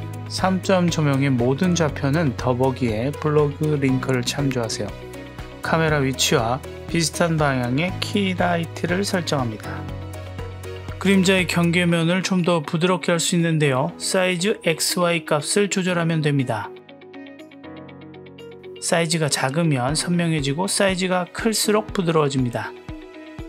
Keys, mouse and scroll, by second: 1.6-3.1 drag, 4.4 click, 5.4 ctrl+alt+q, 6.0 click, 8.1 click, 12.3 click, 14.7 click, 15.5 click, 18.2 BackSpace, 19.0 BackSpace, 20.7 click, 21.8 click.